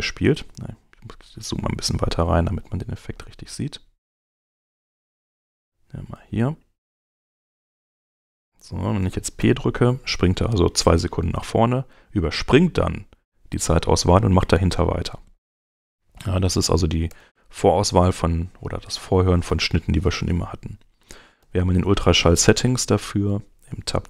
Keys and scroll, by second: 0.1 Home, 1.5 Home, 3.6 Home, 9.1 p, 16.8 Return, 17.7 Escape, 21.1 shift+,.